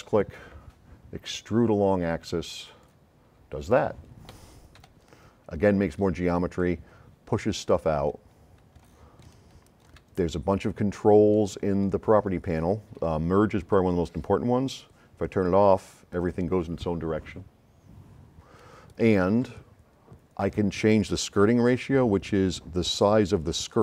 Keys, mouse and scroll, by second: 0.0 right click, 2.7 click, 4.8-6.0 right drag, 4.8 s, 7.7-8.5 drag, 8.9 s, 9.3 right click, 10.2 middle click, 11.4-11.9 drag, 15.4 click.